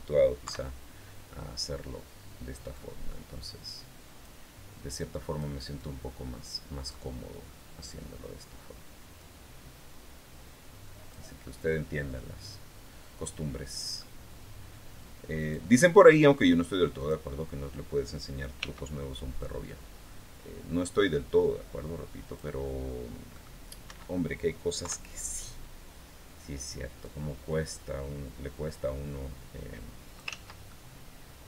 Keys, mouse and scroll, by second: 0.2 KP_3, 0.9-1.3 scroll down 2, 2.5-4.2 drag, 4.7 click, 5.6-6.9 drag, 6.9-7.5 scroll down 2, 9.0-11.1 drag, 11.2 scroll down 2, 11.9-13.9 middle drag, 15.2 click, 16.8 click, 18.4 c, 19.2-22.3 drag, 23.1 middle click, 23.7 Escape, 24.6 KP_3, 26.8-30.2 drag, 30.1 ctrl+z, 30.5-31.4 ctrl+middle drag.